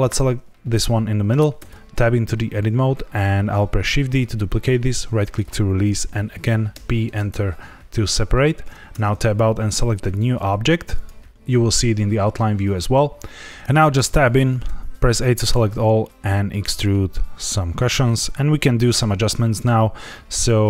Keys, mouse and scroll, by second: 0.0 click, 1.5 Tab, 3.8 shift+d, 4.8 right click, 6.7 p, 8.9 Tab, 9.2 click, 10.4 click, 10.9 click, 13.9 Tab, 14.6 a, 15.4 e, 18.4 click.